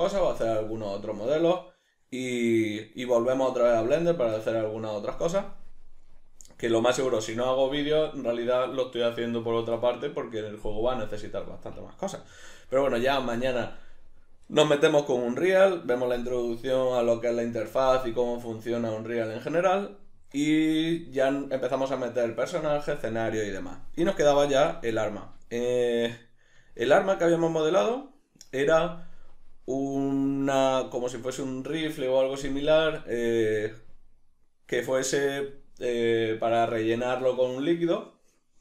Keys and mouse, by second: 24.0 middle click.